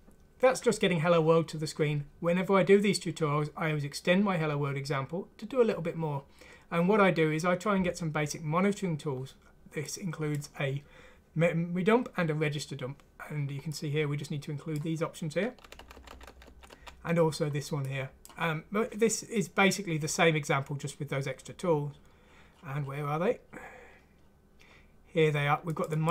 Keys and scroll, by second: 15.7 Page_Up, 15.8 Page_Up, 16.0 Page_Up, 16.2 Page_Up, 16.3-16.7 Page_Up, 16.5 Page_Up.